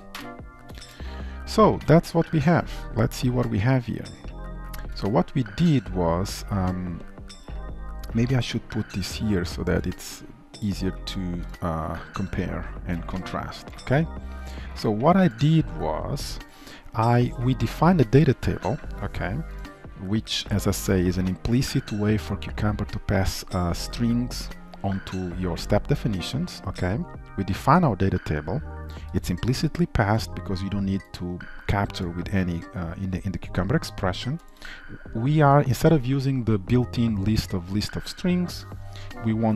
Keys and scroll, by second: 0.2 ctrl+alt+l, 0.8 ctrl+s.